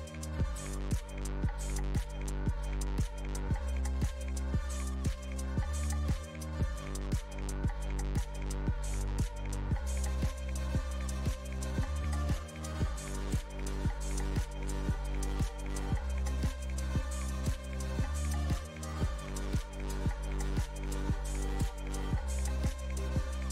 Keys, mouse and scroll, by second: 1.4-4.0 scroll down 1, 4.0-7.8 drag, 12.3-23.5 middle drag.